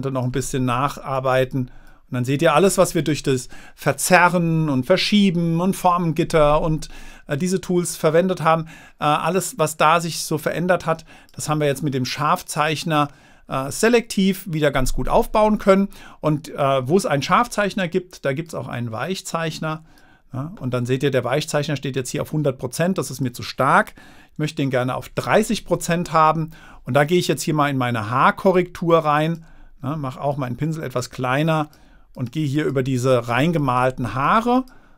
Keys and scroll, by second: 25.2 3, 27.3 0.